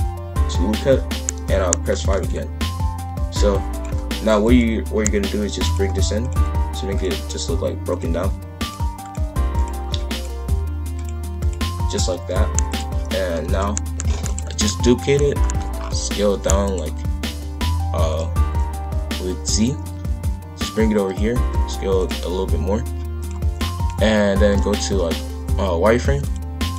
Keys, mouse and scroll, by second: 3.7 click, 5.0 g, 6.2 click, 6.4 g, 7.9 click, 8.2 g, 9.0 click, 9.2 g, 10.1 click, 10.5 g, 11.4 click, 12.1 shift+f, 13.3 ctrl+l, 14.1 shift+d, 14.6 KP_5, 14.6 KP_1, 15.3-16.1 shift+scroll up 2, 15.4 shift+middle click, 16.1 s, 17.0 s, 19.8 g, 23.6-23.9 scroll up 3, 23.9 z, 26.1 b, 26.6 click.